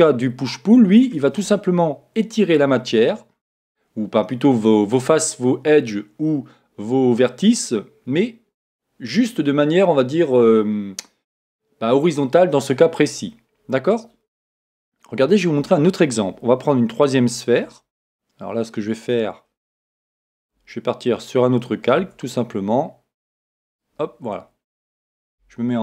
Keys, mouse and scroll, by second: 0.4-2.3 middle drag, 18.4-20.2 scroll down 1, 20.2 scroll down 1, 20.4-21.4 middle drag, 22.0 Tab, 23.6-25.4 drag, 25.3 KP_1.